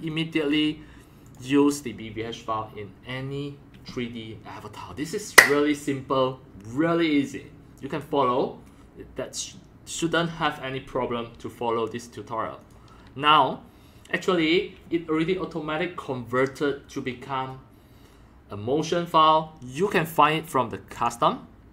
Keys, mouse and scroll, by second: 0.0 click, 1.2 click, 2.2-6.4 drag, 12.6 click, 12.7-17.7 drag, 20.9 click.